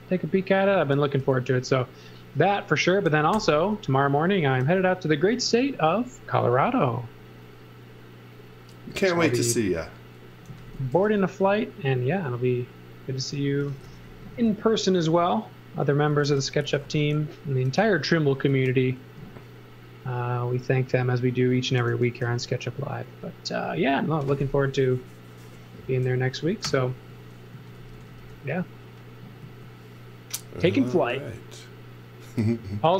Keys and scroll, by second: 1.2 space, 3.3 g, 4.6 e, 8.8 space, 9.8 space, 10.5 z, 10.9 b, 13.3-14.3 typing, 15.8-17.6 typing, 22.2 b, 26.6-29.4 typing.